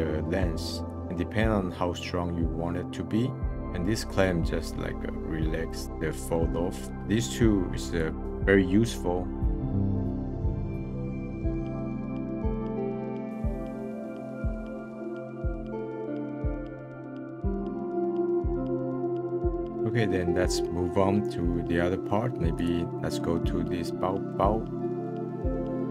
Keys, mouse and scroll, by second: 0.8-2.7 drag, 3.5-5.8 drag, 5.8 scroll down 1, 5.9-6.5 middle drag, 7.0 click, 7.9 click, 8.1 middle drag, 9.2-9.9 middle drag, 9.8 scroll down 3, 10.1 click, 10.5 middle click, 10.9 click, 11.3 click, 11.5 middle click, 11.6 click, 12.1 middle click, 12.3 middle click, 12.4 click, 12.6 middle click, 13.1 middle click, 13.2 scroll up 3, 13.3 scroll down 3, 13.4 scroll up 1, 13.5 click, 13.7 click, 13.9 middle click, 14.0 click, 14.2 scroll down 1, 14.3 middle click, 14.4 click, 14.5 ctrl+z, 14.5 f, 14.6 click, 14.7 middle click, 14.8 click, 15.0 middle click, 15.2 click, 15.4 click, 15.7 middle click, 16.1 click, 16.2 ctrl+z, 16.3 click, 16.4 middle click, 16.6 ctrl+z, 16.7 f, 16.8 ctrl+z, 17.0 click, 17.2 middle click, 17.3 scroll down 1, 17.4 middle click, 17.5 click, 17.8 click, 18.1 click, 18.4 click, 18.7 middle click, 18.8 click, 19.1 middle click, 19.3 click, 19.5 middle click, 19.5 click, 19.6 middle click, 19.7-20.2 scroll up 2, 21.4-22.5 middle drag, 22.5-23.0 drag, 23.0 middle click, 24.1-24.8 middle drag, 25.3-25.9 scroll up 2.